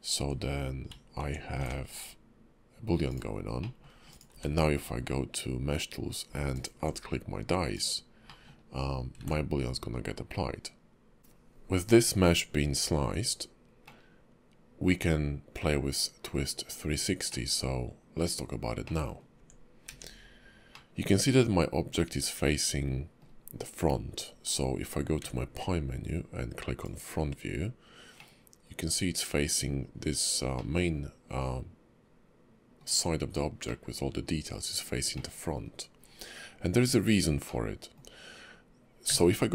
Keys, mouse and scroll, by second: 0.2 Tab, 1.2 Tab, 1.6 ctrl+`, 3.6 middle click, 4.1 click, 4.3 q, 8.2 middle click, 9.2 ctrl+`, 11.2 shift+middle click, 11.2 scroll down 1, 11.2 q, 13.0 Tab, 13.9 middle click, 16.5 scroll up 2, 17.3 middle click, 18.3-18.8 scroll down 2, 18.8 middle click, 19.3 Tab, 19.9 q, 20.7 middle click, 24.1-25.2 scroll down 2, 25.2 `, 28.2 middle click, 30.6 middle click, 33.6 middle click, 35.1 middle click, 37.5 middle click, 39.1 q.